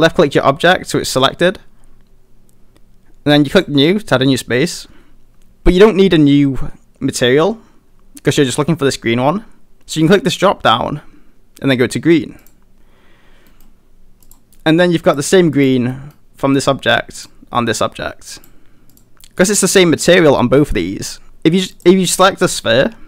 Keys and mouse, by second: 10.0-12.5 drag, 13.5 middle click, 14.2 click, 14.5 middle drag, 15.0 click, 15.5 click, 15.9 middle drag, 18.3 click, 18.9 click, 21.7 click.